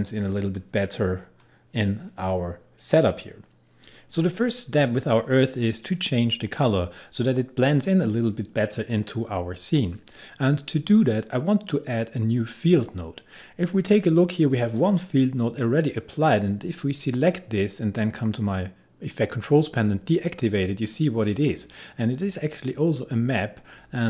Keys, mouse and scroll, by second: 0.1-5.7 drag, 14.8 click, 20.1 click, 23.0 click.